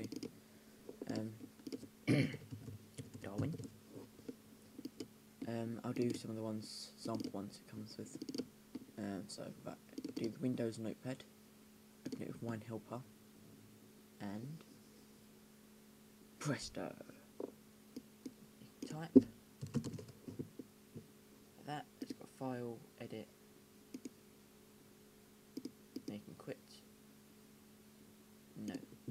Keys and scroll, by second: 2.0-4.0 typing, 19.3-20.5 typing.